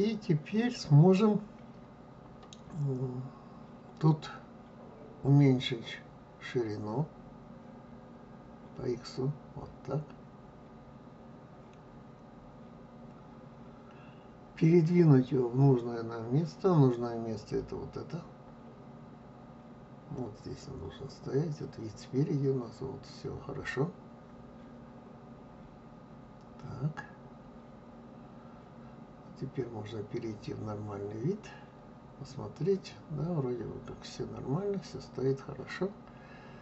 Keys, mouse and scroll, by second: 23.4-26.4 middle drag, 29.2-31.6 middle drag, 31.6 click, 32.9-36.0 middle drag.